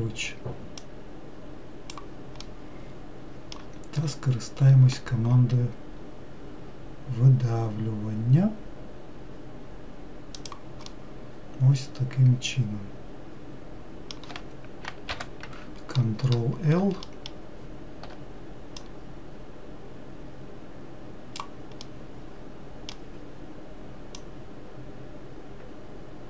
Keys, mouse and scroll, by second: 1.1 click, 2.8-4.3 middle drag, 4.3 e, 11.2-14.3 middle drag, 15.4 ctrl+l, 17.3 alt+middle click, 19.1 click, 22.1-24.4 middle drag, 24.4 click.